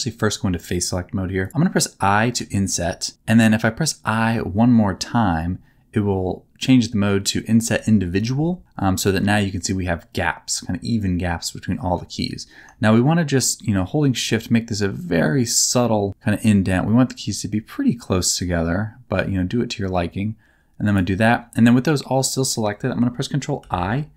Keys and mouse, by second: 2.3 i, 7.7 i, 20.8 shift+click, 23.6 ctrl+i.